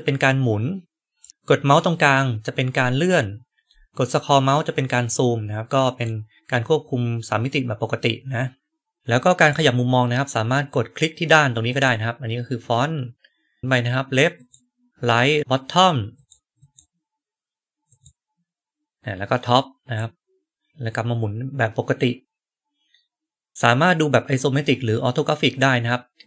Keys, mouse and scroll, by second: 3.5-4.2 scroll up 2, 4.2 scroll down 2, 4.3 scroll up 2, 4.4 scroll down 2, 4.6 scroll up 2, 4.7 scroll down 2, 4.9 scroll up 2, 5.0-5.4 scroll down 2, 5.4-5.7 scroll up 2, 6.0-9.4 right drag, 11.6 click, 13.6 right click, 14.3 click, 15.3 click, 16.1 click, 16.5 click, 17.8 click, 19.9-23.5 right drag.